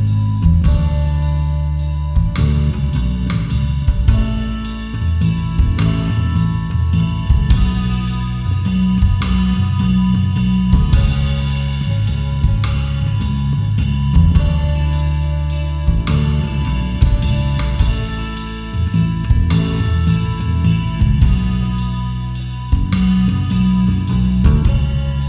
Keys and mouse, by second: 4.3 alt+shift+click, 5.7 alt+shift+click, 10.0 shift+middle click, 10.2 shift+middle click, 13.6 alt+shift+click, 15.7 alt+shift+click, 19.2 alt+shift+click.